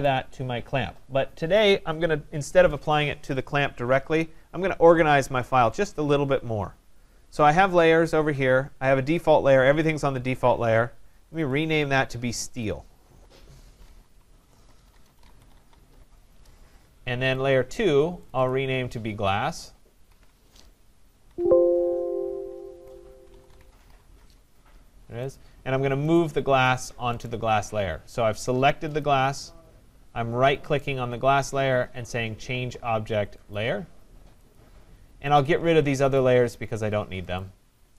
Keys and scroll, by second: 14.7 BackSpace, 20.0 ctrl+a, 21.2 ctrl+g.